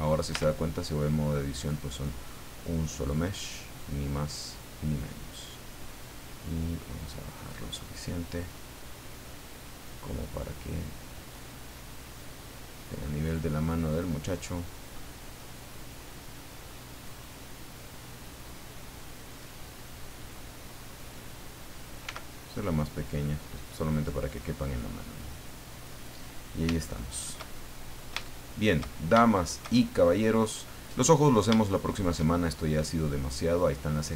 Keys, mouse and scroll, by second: 0.3 Tab, 2.0 click, 3.8-5.2 drag, 6.1-7.7 drag, 7.7-8.7 middle drag, 9.8-11.5 drag, 12.2-14.2 drag, 14.3 middle click, 15.9-17.2 drag, 18.5 click, 20.3 click, 22.0 s, 24.3 click, 25.2 click, 26.2 scroll down 2, 26.9 shift+middle click, 27.9 middle click, 28.2 shift+middle click, 29.3 shift+middle click, 30.2 middle click, 31.1-31.4 scroll up 1, 31.7 shift+middle click, 33.1-34.1 middle drag.